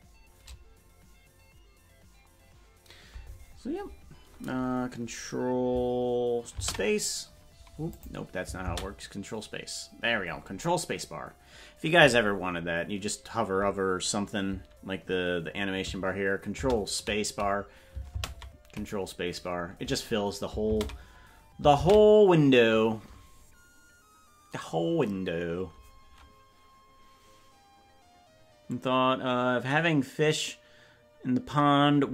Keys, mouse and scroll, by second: 9.2 ctrl+space, 16.5 ctrl+space, 20.7 ctrl+space.